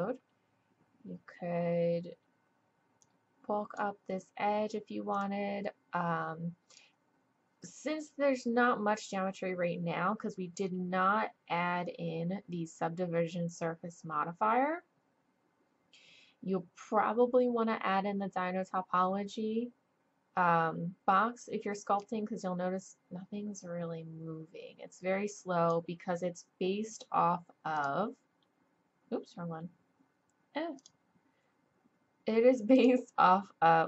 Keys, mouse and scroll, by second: 3.0-5.1 drag, 5.1-7.1 drag, 22.0-24.0 drag, 27.7-28.4 drag, 29.0 click.